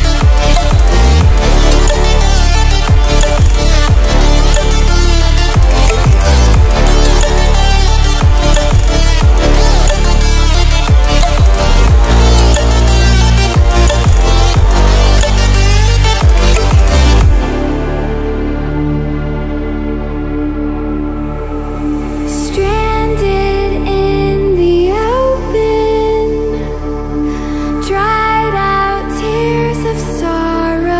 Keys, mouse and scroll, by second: 4.5-20.6 drag, 24.1-29.0 drag.